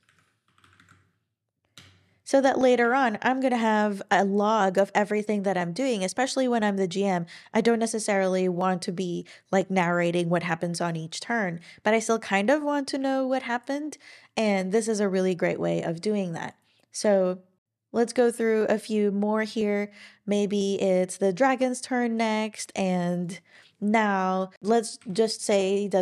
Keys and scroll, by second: 0.4 [, 0.7 super+v, 1.7 Return, 25.5 Return.